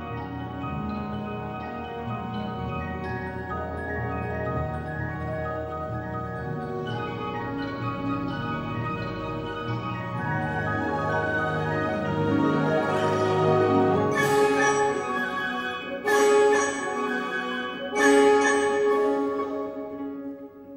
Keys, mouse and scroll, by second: 0.0 v, 0.2 v, 1.5 F12, 11.1 click, 12.9-14.3 middle drag, 15.9 click, 18.4 F12.